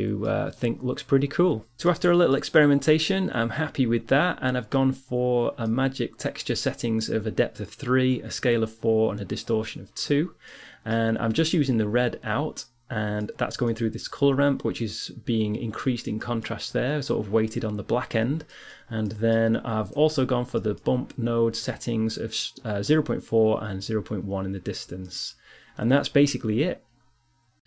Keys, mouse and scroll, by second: 6.2-7.7 right drag, 10.4-13.5 middle drag, 13.5-15.5 right drag, 20.4 middle click.